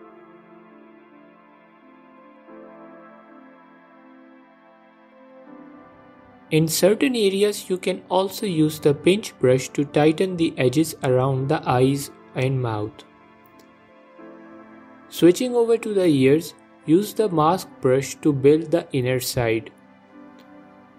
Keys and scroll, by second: 1.2 Page_Up, 1.8 Page_Up, 1.8 Page_Up, 2.7 Page_Down, 2.8 Page_Down, 3.9 Page_Up, 4.0 Page_Up, 4.8 f, 6.9 f, 9.9 f, 12.0 f, 12.4 g, 12.8 f, 13.9 ctrl+Tab, 18.1 ctrl+Tab.